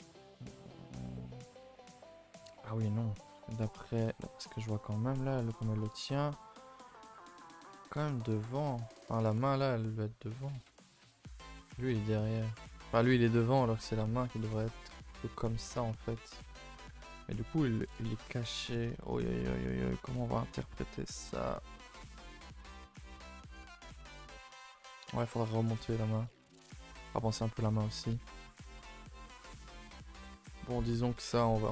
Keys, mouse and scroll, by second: 2.7 KP_0, 3.5-3.8 scroll up 2, 3.8-4.4 shift+middle drag, 4.4-5.2 scroll up 7, 5.2 shift+middle click, 5.4-5.8 scroll up 2, 5.8 a, 6.0 a, 6.6-6.9 scroll down 1, 6.9-9.6 shift+middle drag, 9.6 scroll up 1, 9.8-10.3 scroll down 1, 10.3 scroll up 2, 10.8 click, 11.8 shift+click, 12.2 click, 12.8 shift+click, 13.1 middle click, 13.5 g, 15.5-17.1 middle drag, 17.1 ctrl+z, 17.6-18.1 middle drag, 18.1-18.5 scroll down 7, 18.6-19.1 middle drag, 19.1-19.4 scroll up 3, 23.4-25.2 middle drag, 25.2-25.5 scroll up 2, 25.6 shift+middle drag, 25.8 scroll down 1, 26.1-28.9 middle drag, 28.9 r, 29.6 g, 30.2-31.6 middle drag, 31.6 r.